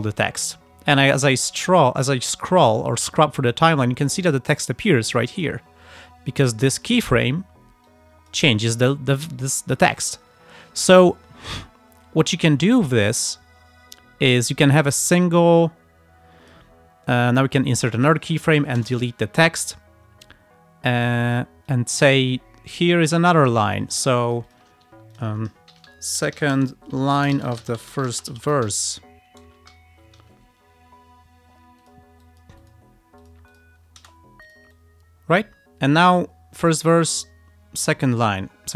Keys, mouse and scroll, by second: 0.3-5.1 drag, 5.4 click, 6.4 click, 7.9 click, 10.5-10.9 ctrl+scroll up 2, 11.1 ctrl+scroll down 2, 12.5-16.8 drag, 17.6 click, 18.4 click, 18.8 BackSpace, 21.7-23.6 drag, 23.8 click, 24.4 click, 24.9 Escape, 25.2 click, 25.5-30.2 typing, 31.8 click, 32.3 click, 33.2 click, 33.5 click, 34.0 space, 34.5-38.7 drag.